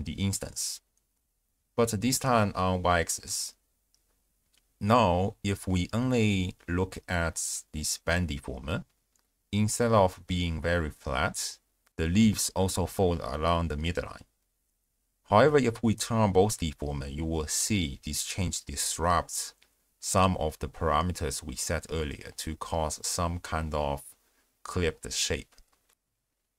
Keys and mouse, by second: 5.1 click, 6.2 m, 6.9-7.5 drag, 7.7-8.0 shift+drag, 8.6 click, 14.0 click, 15.3 m, 16.4-16.8 drag, 17.3 shift+click, 26.1 z.